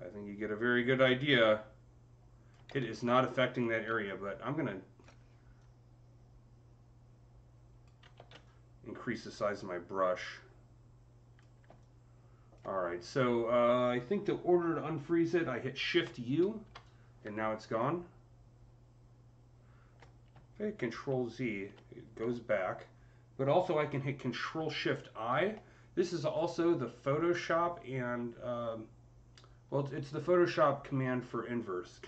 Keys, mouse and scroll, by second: 2.5 ctrl+z, 3.7-4.9 typing, 3.9-11.6 drag, 8.0 ctrl+z, 11.6-15.0 alt+drag, 15.9 ctrl+z, 15.9-26.0 alt+drag, 16.2 shift+u, 20.7 z.